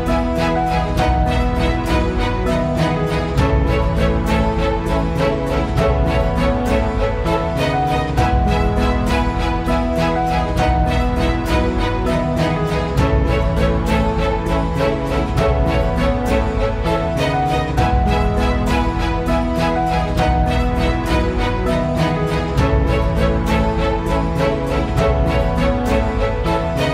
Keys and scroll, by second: 7.8 F8, 9.9 Escape, 13.1 Escape, 16.0 Escape, 19.8 Escape.